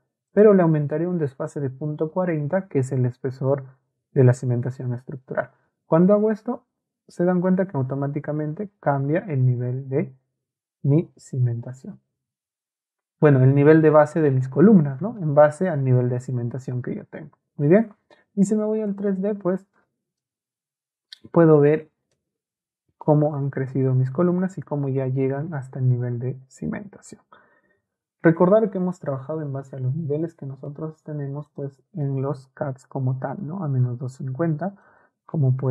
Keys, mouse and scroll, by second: 18.9 click, 31.5 click.